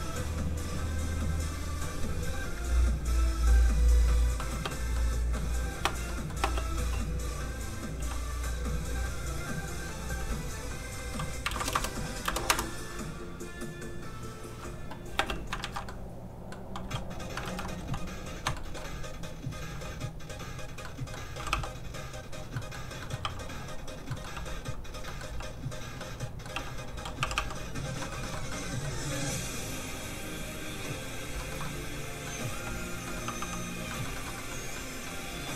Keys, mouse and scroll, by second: 0.8 click, 4.0 middle click, 4.5 space, 4.9 middle click, 5.8 space, 6.1 middle click, 6.4 space, 7.3 click, 8.0 g, 8.9 click, 9.2 scroll up 1, 10.5 click, 11.4 KP_1, 11.5 KP_0, 12.5 Return, 12.5 KP_0, 13.5 click, 15.1 space, 15.6 alt+shift+z, 15.9 alt+middle click, 16.0 middle click, 17.4 alt+shift+z, 18.4 shift+z, 18.7 shift+middle click, 19.5 middle click, 19.7 x, 19.9 click, 20.8 middle click, 21.3 r, 22.2 click, 22.7 middle click, 23.2 r, 23.9 click, 24.1 middle click, 24.3 g, 24.6 click, 25.0 middle click, 25.3 g, 25.8 click, 26.0 middle click, 26.5 g, 26.8 click, 27.2 r, 27.8 click, 28.0 middle click, 28.2 shift+middle click, 29.4 middle click, 30.6 click, 31.5 shift+middle click, 31.6 middle click, 32.8 click, 32.8 g, 33.2 middle click, 33.2 r, 33.7 click, 33.9 middle click, 34.1 shift+middle click, 34.3 middle click, 34.5 scroll up 1, 34.7 middle click.